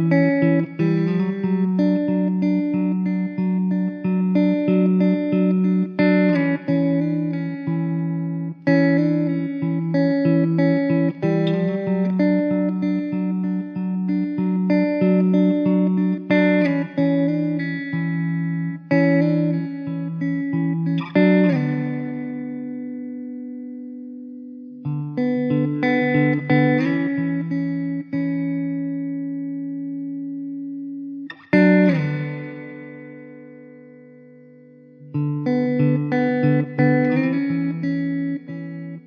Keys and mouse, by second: 16.1 middle click, 18.6 middle click, 24.3 alt+middle click, 28.8 alt+w, 29.6 middle click, 35.6 alt+w, 36.2 alt+middle click, 36.6 alt+middle click, 36.9 alt+w, 37.6 middle click.